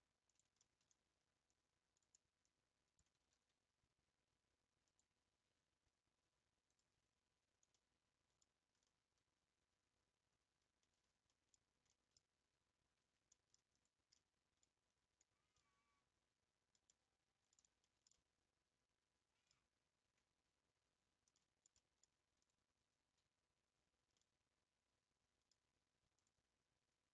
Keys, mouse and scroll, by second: 0.6-1.9 shift+middle drag, 1.9 click, 3.1 click, 3.3 g, 5.2-5.6 scroll down 6, 6.7 click, 7.1 scroll down 2, 7.3 scroll up 1, 7.7-8.4 middle drag, 8.4 scroll down 3, 8.8-11.6 middle drag, 11.6 scroll down 5, 11.9-12.4 middle drag, 12.4 Tab, 13.2 scroll up 1, 13.3-13.7 middle drag, 13.7 click, 14.1-14.6 middle drag, 14.6 scroll down 1, 14.9 scroll up 7, 15.6-19.6 middle drag, 19.6-19.9 scroll up 2, 20.4 Tab, 20.8 Tab, 21.3-22.5 middle drag, 22.5 click, 22.8 Tab, 23.2 scroll up 2, 24.1-26.3 middle drag, 26.3 click.